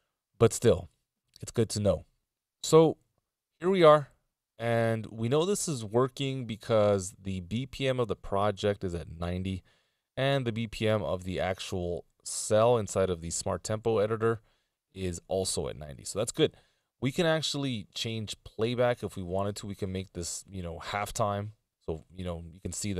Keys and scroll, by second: 8.6 ctrl+alt+super+m, 13.7 ctrl+alt+super+m.